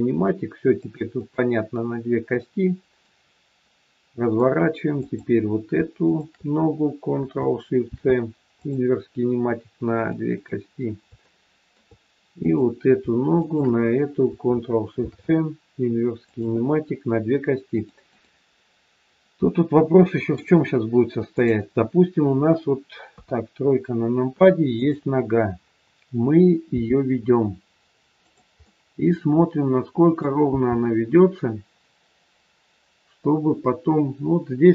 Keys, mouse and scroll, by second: 0.7 click, 1.0 click, 2.9 middle click, 4.8 click, 6.1 shift+click, 7.8 ctrl+shift+c, 9.9 click, 10.3 click, 11.2 shift+middle click, 12.3 click, 13.4 shift+click, 16.3 ctrl+shift+c, 17.7 click, 18.0 click, 19.0-19.4 scroll down 2, 19.4 middle click, 21.2 click, 23.1 KP_3, 24.7 click, 26.7 g, 28.7 middle click, 30.4 g.